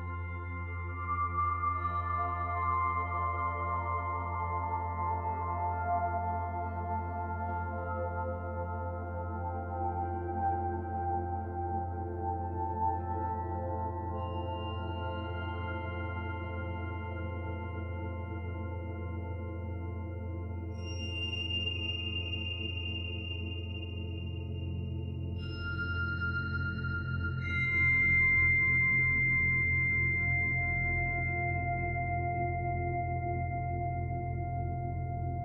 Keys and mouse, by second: 0.2 s, 2.4-5.6 middle drag, 6.4 s, 20.6 middle click, 22.4 ctrl+KP_Add, 24.0 s, 27.1-28.1 middle drag, 28.5 ctrl+z, 29.5 s, 32.3 s.